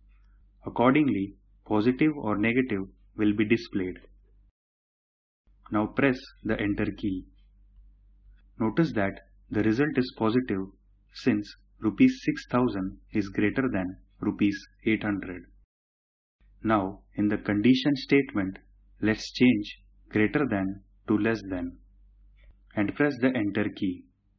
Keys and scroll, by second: 6.4 Return, 22.9 Return.